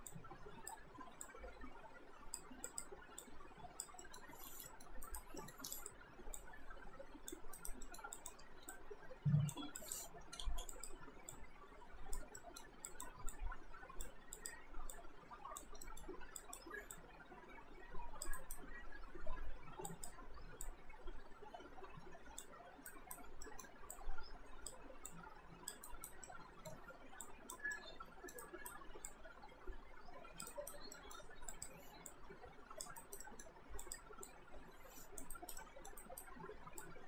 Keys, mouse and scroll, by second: 4.0 middle click, 4.7 middle click, 5.1 right click, 5.4 middle click, 5.8 click, 7.6 alt+right click, 7.9 alt+middle click, 8.2 click, 10.5 ctrl+z, 10.7 click, 12.4 alt+middle click, 12.9 click, 15.9 alt+middle click, 16.4 click, 18.4 alt+right click, 19.9 click, 22.9 alt+right click, 23.5 alt+middle click, 23.9 click, 25.9 alt+right click, 26.3 alt+middle click, 27.3 alt+click, 27.8 alt+middle click, 28.4 alt+right click, 29.1 click, 30.5 alt+right click, 31.0 alt+middle click, 31.5 click, 33.0 alt+right click, 33.2 alt+middle click, 33.8 click, 35.4 alt+right click, 35.6 alt+middle click, 36.0 alt+right click, 36.8 click.